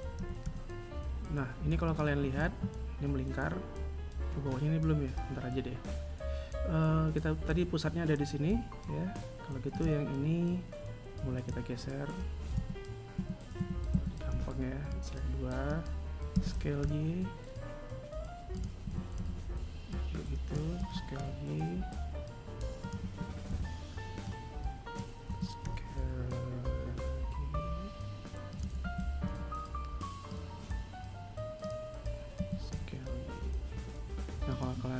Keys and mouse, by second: 0.3 g, 2.4 a, 9.7 right click, 11.2 g, 13.1 a, 13.5 a, 14.3 b, 18.8 a, 19.1 b, 22.9 a, 28.8 a, 29.3 b, 32.3 s.